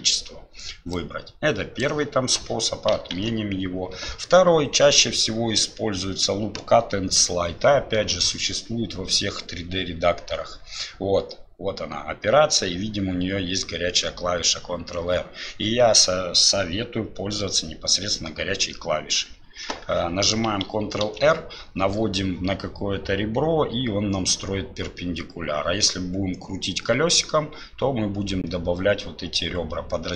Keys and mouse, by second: 0.9 click, 3.1 ctrl+z, 21.0 ctrl+r.